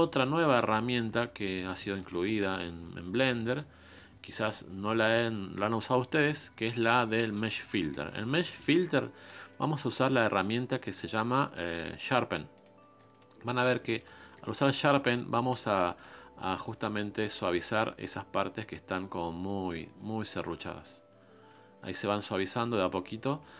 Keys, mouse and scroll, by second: 0.2-0.6 scroll up 2, 0.6-7.4 middle drag, 7.4 click, 8.0 shift+middle click, 8.3 scroll up 1, 8.5-12.6 middle drag, 12.6 click, 13.1-14.9 shift+middle drag, 14.9-15.6 scroll up 3, 15.6-17.5 shift+middle drag, 18.0 click, 20.4 click, 22.0 click.